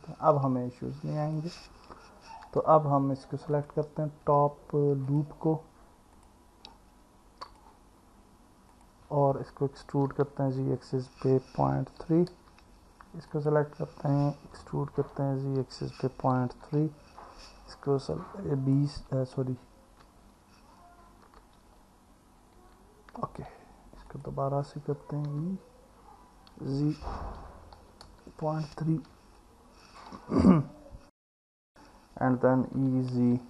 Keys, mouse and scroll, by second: 0.2 Delete, 3.6 click, 5.1 click, 6.2 click, 7.5 click, 8.7 click, 10.1 e, 10.6 z, 11.8 KP_Decimal, 12.0 KP_3, 13.3 click, 15.0 e, 15.6 z, 16.5 KP_Decimal, 16.8 KP_3, 20.0 Escape, 21.6 ctrl+z, 24.1 click, 25.3 e, 26.5 z, 27.5 KP_Decimal, 27.8 KP_3, 29.4 alt+middle click, 32.8 e, 33.2 z.